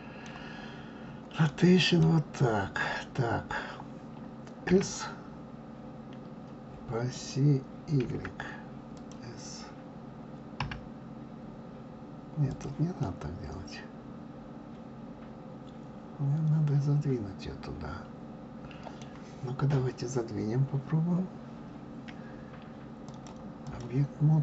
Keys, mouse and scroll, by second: 1.5-4.5 middle drag, 4.7 s, 8.1 y, 8.9 click, 10.6 s, 13.0-16.0 middle drag, 23.0-24.4 drag.